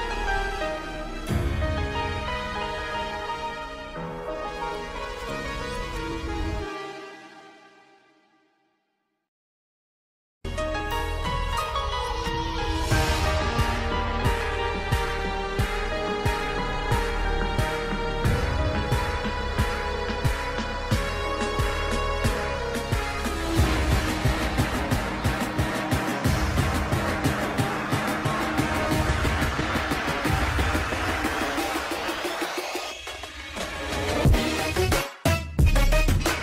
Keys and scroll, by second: 6.5 Escape, 11.0 F2, 15.3 F2, 32.6 ctrl+z.